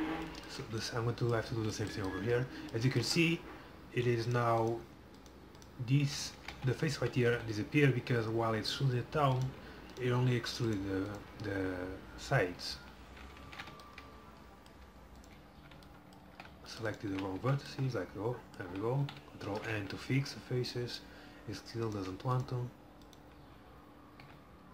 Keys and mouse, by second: 4.3-6.5 middle drag, 6.5 ctrl+z, 7.5 a, 9.4-12.8 middle drag, 12.8 f, 13.5 ctrl+z, 16.4 c, 17.2 f, 17.5 a, 18.8 a, 19.5 ctrl+n, 19.8 a, 24.3 f.